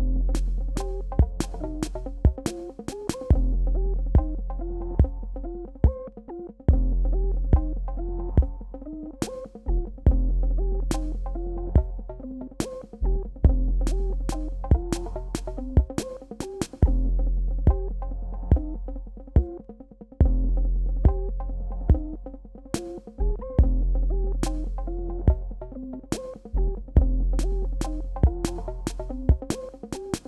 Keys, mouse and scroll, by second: 0.8-5.1 drag, 5.2 click, 5.8-6.1 alt+scroll down 2, 6.4 click, 9.2 space, 9.3 click, 9.7 space, 10.3 click, 19.1 alt+scroll up 1, 20.1-21.6 drag, 22.1 alt+scroll down 1, 22.8-26.2 drag, 26.8 alt+scroll up 1, 27.8-29.8 drag.